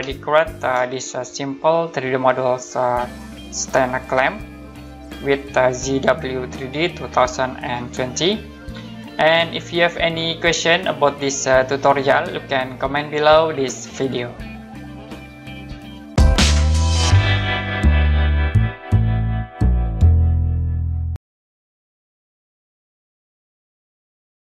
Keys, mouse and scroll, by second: 0.3 right click, 0.9 right click, 5.0 middle click, 9.0 middle click.